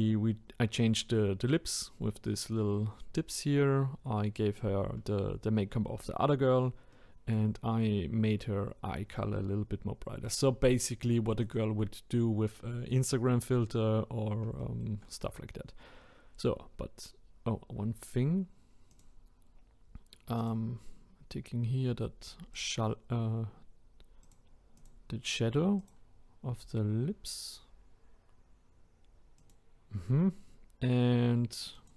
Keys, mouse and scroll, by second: 6.9-8.1 middle drag, 8.1-10.7 scroll up 2, 11.4 click, 12.4-13.8 scroll up 1, 13.8-14.6 scroll down 1, 14.6-15.3 shift+middle drag, 15.3-16.0 scroll up 1, 17.5-18.9 scroll up 5, 18.9 click, 24.2 click, 31.8-31.9 drag.